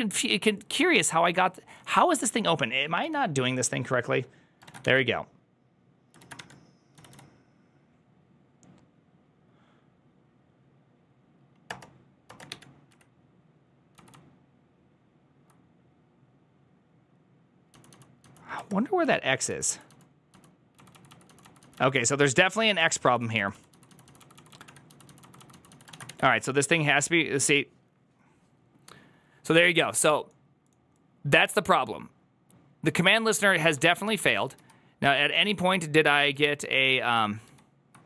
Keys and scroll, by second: 4.5-7.0 typing, 11.9 Return, 13.5 typing, 14.6 typing, 15.9 typing, 17.6-25.9 typing, 34.1 ctrl+a, 34.1 ctrl+u, 34.1 [, 34.4 ctrl+u, 35.2 ctrl+u, 35.8 ctrl+u, 36.8 ctrl+u, 37.6 ctrl+u.